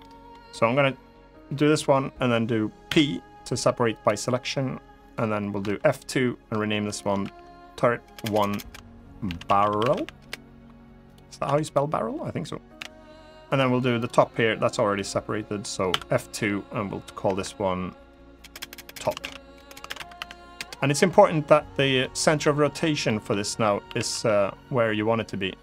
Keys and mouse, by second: 2.6 p, 4.8 click, 5.3 F2, 7.9 BackSpace, 8.3 BackSpace, 9.5 r, 10.8 click, 11.2 Tab, 11.4 click, 12.5 l, 13.7 click, 14.6-15.3 middle drag, 15.6 F2, 18.3 BackSpace, 18.4 BackSpace, 18.8 BackSpace, 19.4 BackSpace, 21.7 middle click, 22.8 middle click, 23.6 r, 23.8 z.